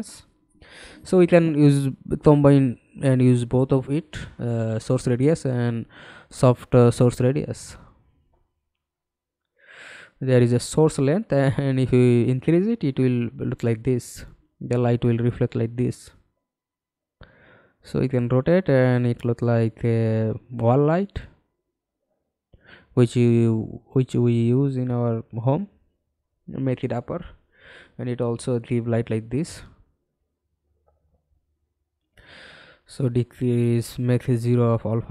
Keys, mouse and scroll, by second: 12.9-14.2 scroll down 1, 14.2 scroll up 1, 15.4 scroll down 1, 15.9 e, 18.5 w, 19.8 alt+click, 24.6 f, 25.3 alt+click, 26.6 middle click, 27.2-27.6 scroll down 1, 27.7 scroll up 1, 32.7-33.0 scroll down 2, 33.1-35.1 scroll up 2.